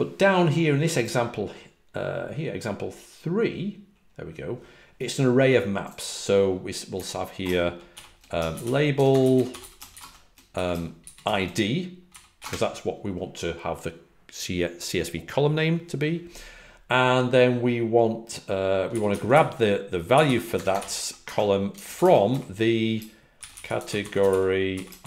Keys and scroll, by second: 8.8-11.7 typing, 14.1-15.6 typing, 18.8-21.7 typing, 23.5-25.0 typing.